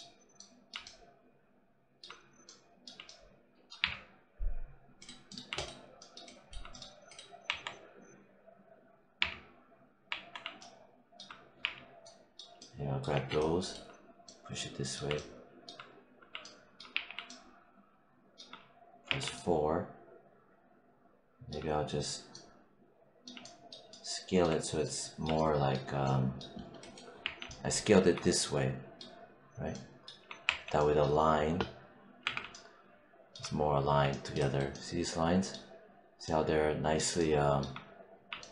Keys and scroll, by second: 3.7 3, 7.3 1, 9.1 3, 11.5 4, 13.0 5, 16.8 r, 18.9 4, 27.1 5, 30.3 4, 32.1 q.